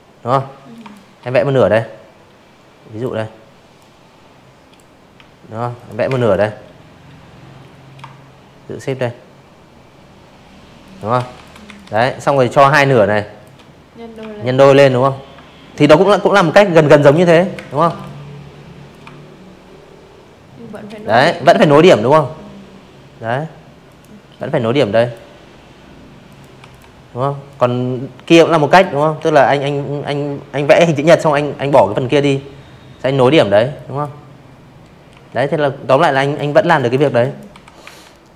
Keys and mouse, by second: 0.7-1.7 drag, 2.7 alt+click, 3.0 space, 3.1 click, 5.8 shift+click, 7.8 shift+click, 8.0-9.4 typing, 8.4 click, 8.7 click, 9.3-10.4 drag, 11.1 alt+shift+click, 12.8 ctrl+t, 14.0 click, 14.1 z, 14.3 click, 14.5 space, 14.6 click, 14.8 v, 14.9 click, 15.9-17.7 shift+drag, 17.9 click, 18.4 a, 18.5 click, 20.8 click, 21.7 click, 23.2 click, 23.6 v, 23.6 click, 24.4 click, 25.2 click, 25.6 click, 26.1 Delete, 30.7 click, 32.1 Delete, 33.1 click, 33.6 space, 33.7 click, 34.0 z, 34.2 click, 34.5 v, 34.8 a, 35.3 click.